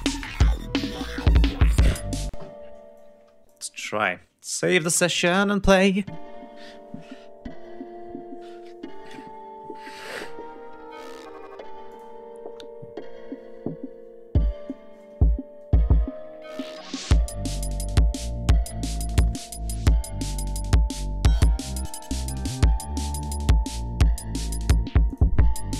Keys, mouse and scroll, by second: 2.2 space, 2.9 click, 4.8 ctrl+s, 5.2 ctrl+space, 9.0-9.4 scroll down 2, 10.1-10.4 scroll down 2, 10.6 scroll up 2, 11.8 click, 13.2 scroll down 2, 13.6 scroll up 2, 14.2 scroll up 2, 15.9 ctrl+scroll up 2, 17.8 ctrl+scroll down 2, 18.2 ctrl+scroll up 2, 19.5-20.0 scroll up 2, 22.0-22.5 scroll down 4, 23.1 click, 25.0 click.